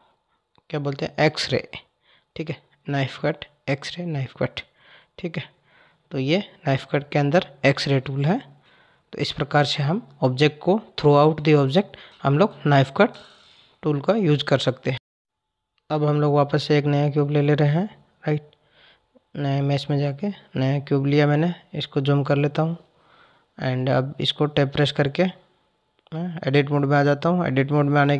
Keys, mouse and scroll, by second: 1.0 click, 1.8 click, 13.0-14.9 drag, 14.9 Tab, 16.7 Delete, 18.1 shift+a, 20.1 shift+a, 21.4 KP_Decimal, 23.4 click, 23.9 click, 24.6 Tab, 27.2-28.1 drag.